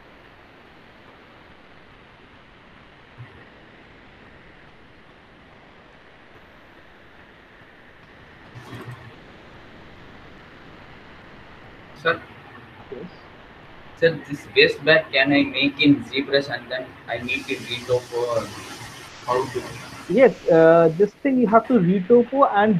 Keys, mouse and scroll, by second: 0.1 click, 0.6 middle click, 0.8 middle click, 1.0 middle click.